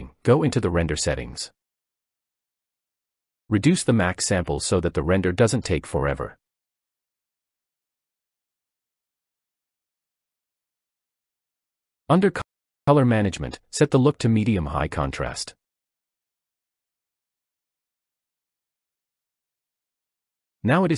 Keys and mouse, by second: 2.6-5.7 drag, 4.7 0, 14.0-16.7 drag.